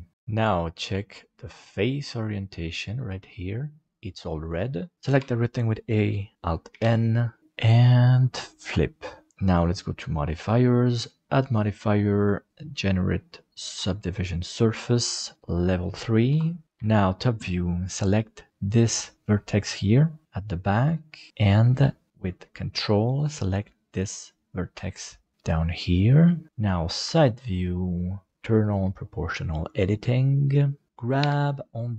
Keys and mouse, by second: 1.3-3.5 drag, 5.2 a, 6.7 alt+n, 8.1-9.3 middle drag, 10.0 click, 11.0-14.3 drag, 15.4 click, 16.8 KP_7, 18.7 right click, 21.3 middle click, 23.9 ctrl+right click, 25.3 middle click, 27.1 KP_3, 31.2 g.